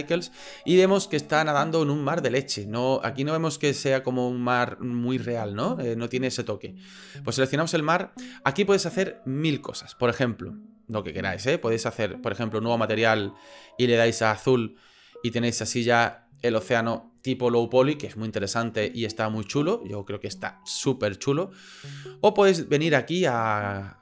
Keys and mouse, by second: 3.0 middle click, 7.4 right click, 11.7 click, 12.6 click, 13.6 click, 15.4 middle drag, 22.2-24.0 drag.